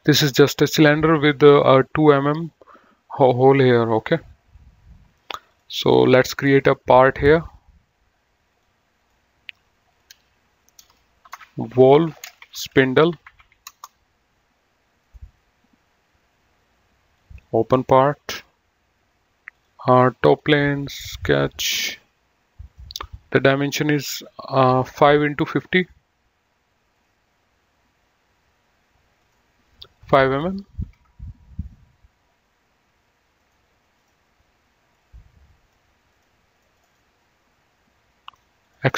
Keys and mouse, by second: 5.8 click, 7.4 click, 10.5 F2, 11.3-13.9 typing, 15.1 right click, 17.1 click, 19.6 click, 21.8 click, 27.2 click, 29.2 click, 30.9 KP_5, 33.6 right click, 34.0 click, 36.3 click, 36.8 middle click, 38.4 click.